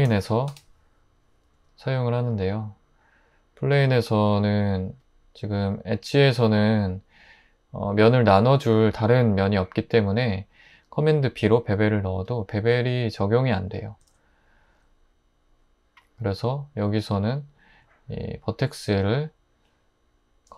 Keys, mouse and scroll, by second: 0.0-0.5 typing, 1.5 Tab, 3.7 typing, 11.3 super+b, 14.0 super+z, 17.8 1.